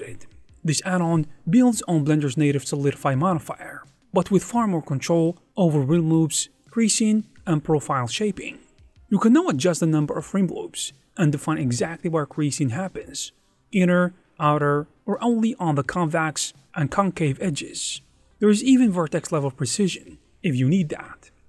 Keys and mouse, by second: 0.0 click, 2.0 click, 4.3 click, 5.9-7.0 drag, 7.5 click, 9.2 click, 10.2 e, 12.4 click, 14.6 click, 16.1 ctrl+middle click, 18.9 click, 19.7 alt+shift+z.